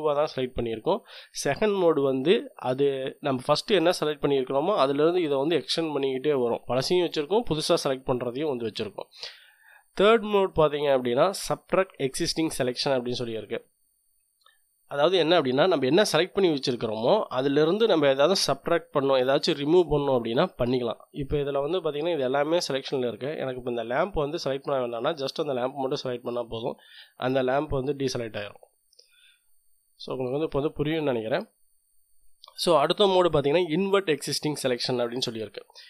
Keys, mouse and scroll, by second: 12.2 click, 24.8 click, 29.9 click, 35.1 click.